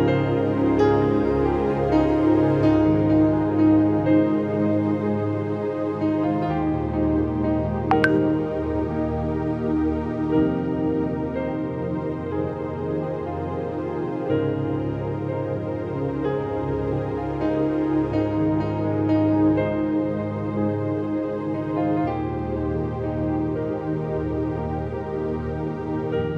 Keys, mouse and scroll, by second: 0.1-1.9 drag, 1.1 ctrl+z, 1.9 [, 3.1 click, 3.4 click, 3.6 click, 5.9 click, 6.1 click, 9.8 double click, 10.0 click, 10.2 click, 10.4 double click, 10.6 click, 10.7 click, 11.0 click, 11.6 double click, 12.5 click, 12.7 click, 12.8 double click, 12.9 click, 13.0 click, 13.7 click, 13.8 double click, 14.0 click, 14.1 double click, 14.2 click, 14.4 click, 14.5 double click, 14.8-15.3 scroll down 5, 15.3 space, 15.6 scroll down 6, 15.8 space, 15.8 click, 16.1-17.0 scroll down 2, 17.0 click, 17.3 click, 17.8-18.3 scroll up 6, 18.5 scroll up 5, 18.5-19.3 typing, 19.9 click, 20.0 click, 20.5 click, 21.8 ctrl+z, 22.1-23.9 typing, 22.1 scroll down 1, 22.1 ctrl+z, 22.5 click, 22.8 click, 23.1 click, 23.9 click, 24.3 click, 24.6 click, 26.1 click, 26.1 ], 26.3 click.